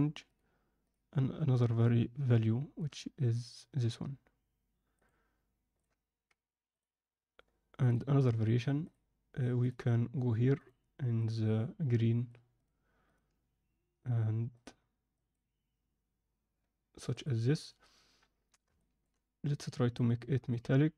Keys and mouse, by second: 6.7-9.6 drag, 10.5-17.6 drag, 18.7 shift+middle click, 19.6 click.